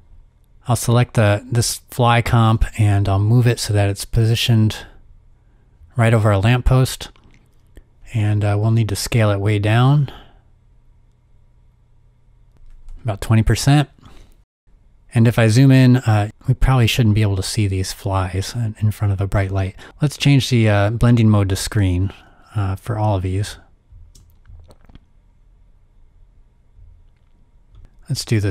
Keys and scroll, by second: 2.4 v, 8.6 s, 12.3-13.0 typing, 15.1 z, 26.6 z, 27.2 space.